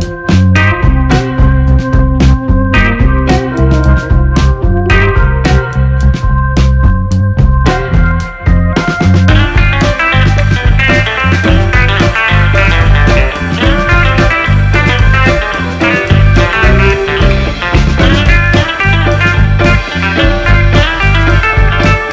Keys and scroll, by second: 5.8 2, 6.0 4, 6.1 Return.